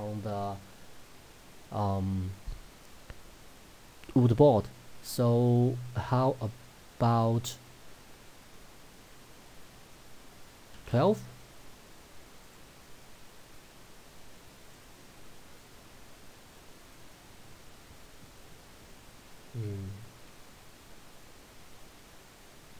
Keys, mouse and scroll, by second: 22.2-22.7 drag.